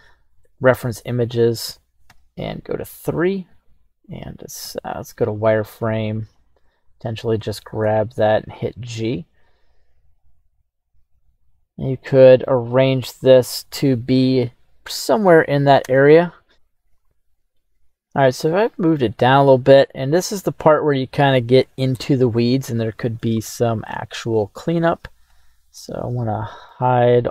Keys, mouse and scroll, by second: 2.1 KP_3, 3.2-4.6 scroll up 1, 4.6 z, 6.8-7.7 right drag, 7.8 g, 13.0 drag, 15.9 Tab, 16.5 right click, 16.5 g, 17.5-18.9 middle drag, 19.5-20.6 scroll up 1, 20.6 scroll up 1, 20.9-21.3 shift+middle drag, 21.5-22.0 scroll up 2, 22.0-23.1 middle drag, 23.3-23.9 shift+middle drag, 24.1-24.7 scroll down 3, 24.8 right click, 25.2 h, 25.7 right click, 25.9 h, 26.3-26.8 middle drag, 26.8-27.3 scroll down 2.